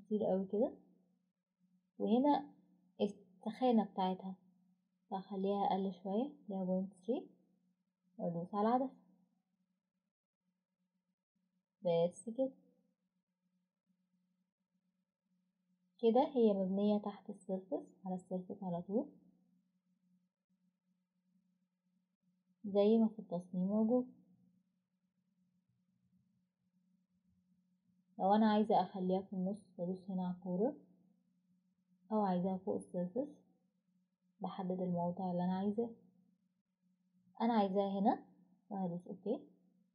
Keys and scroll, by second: 5.5-6.5 typing, 7.0 Return.